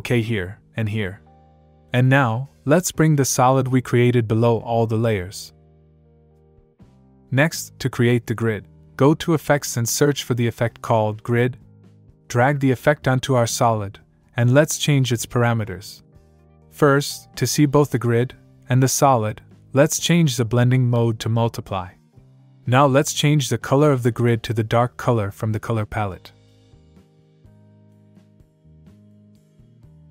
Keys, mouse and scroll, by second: 0.5 click, 2.4 click, 6.6 click, 9.1 click, 9.4-11.2 typing, 12.0 click, 13.2 click, 21.4 click, 22.3 click, 24.4 click, 26.1 click, 27.6 click, 29.1 click.